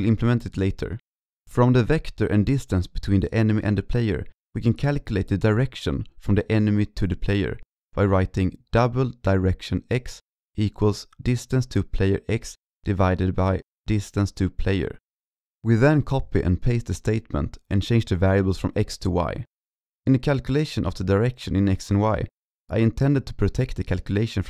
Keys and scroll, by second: 15.6 ctrl+c, 15.7 ctrl+v, 15.8 ctrl+v, 16.3 ctrl+Left, 16.4 ctrl+Left, 16.4 ctrl+Left, 17.2 ctrl+Left, 17.3 ctrl+Left, 17.3 ctrl+Left, 17.7 ctrl+Right, 19.9 ctrl+s.